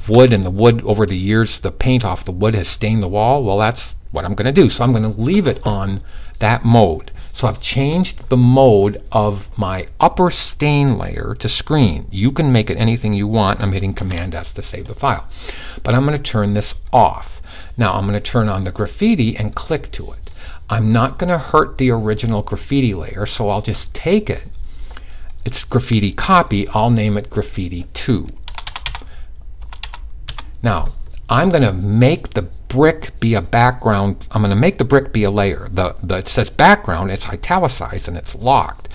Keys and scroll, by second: 13.5 super+s, 29.7 2.